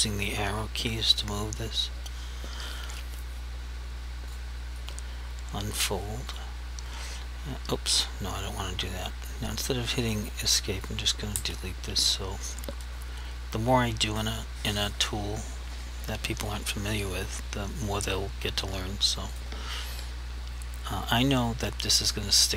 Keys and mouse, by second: 4.4 click, 4.9 right click, 6.4 click, 10.1 click, 11.4 Delete, 19.4 click.